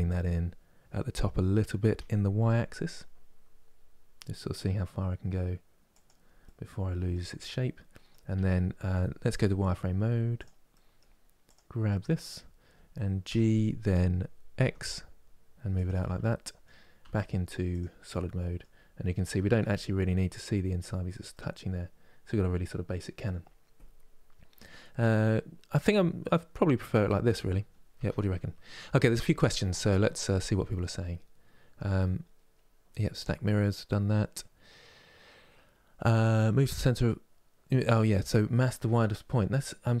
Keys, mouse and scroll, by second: 6.1-8.0 middle drag, 8.0 Tab, 8.2 middle click, 9.0 z, 10.4 middle click, 11.1 click, 11.7-13.0 middle drag, 13.0 g, 15.6 Tab, 16.0 middle click, 16.7 z, 17.8 middle click, 18.5 scroll down 1, 19.4-40.0 middle drag.